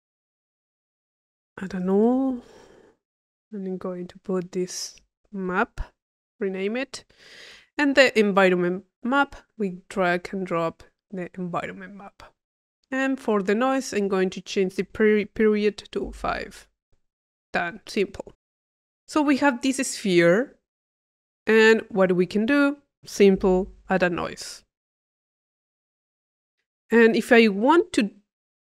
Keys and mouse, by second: 0.0 click, 0.7-2.3 drag, 1.9 u, 2.7 click, 3.3-4.9 drag, 6.5-7.5 drag, 8.9-11.4 drag, 12.1 click, 12.9 click, 14.6 click, 17.6 click, 18.5 click, 19.3 middle click, 20.1 click, 21.0 click, 22.2 click, 23.1 click, 23.8 i, 24.6 click, 25.4 click, 26.3 click, 27.9-28.6 drag.